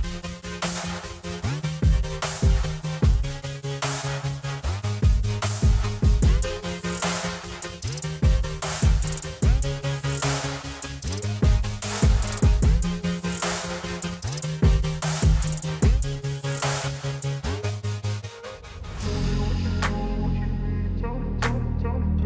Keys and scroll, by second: 9.4 alt+w.